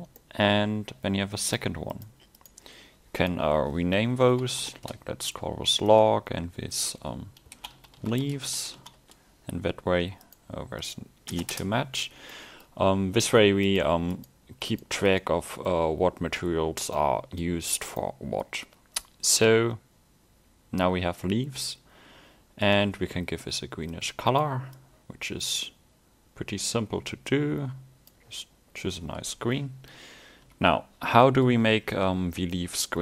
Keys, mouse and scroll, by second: 0.3 middle click, 1.4 click, 8.6 e, 10.3 click, 12.4 middle click, 13.7 click, 15.7 middle click, 17.8 scroll up 1, 18.0 middle click, 22.7 click, 28.8 middle click, 29.8 scroll down 2, 30.4 a, 30.9 scroll up 1, 31.3 middle click, 32.6 middle click.